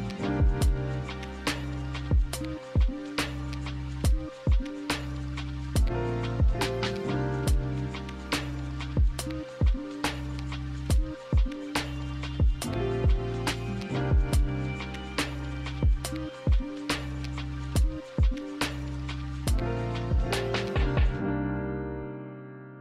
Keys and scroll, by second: 9.1 b, 13.4 ctrl+z, 13.6 ctrl+z, 13.8 ctrl+z, 15.7 a, 17.8 b, 19.3-20.2 typing.